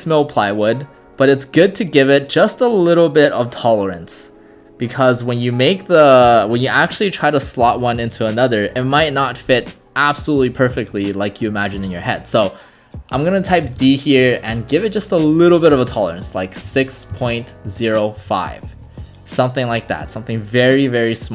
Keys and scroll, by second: 13.7 d, 13.8 space, 16.4-18.2 typing.